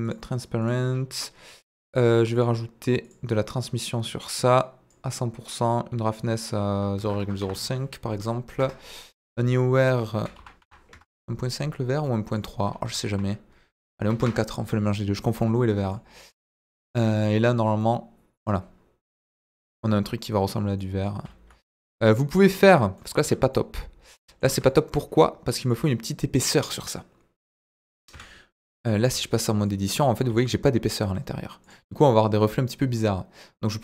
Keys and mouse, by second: 0.0 click, 1.9 click, 2.3 click, 4.6 click, 5.6 click, 6.4-8.9 drag, 9.5-11.4 drag, 12.3-14.7 drag, 15.4-15.9 middle drag, 16.9 click, 17.9-18.4 middle drag, 19.1-19.5 middle drag, 20.9 middle click, 21.2 z, 22.0-22.4 middle drag, 22.9 middle drag, 23.2 Tab, 23.5 middle click, 24.7 Tab, 24.7 middle drag, 25.6 click, 26.4 click, 28.1 KP_Divide, 28.7-29.1 middle drag, 29.1 z, 29.6-30.2 middle drag, 30.2 z, 31.6 click.